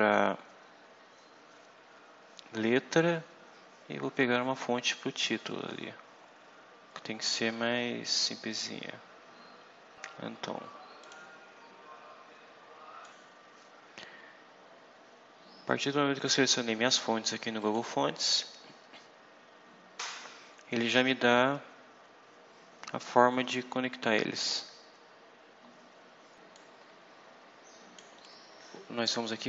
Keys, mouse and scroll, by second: 0.5-3.8 scroll up 14, 4.4 scroll up 2, 5.1-5.7 scroll up 4, 7.1 scroll up 2, 7.6-9.9 scroll up 9, 10.9 click, 13.0 click, 17.5 click, 24.1 scroll down 2, 24.8 scroll up 2, 26.5-28.1 drag.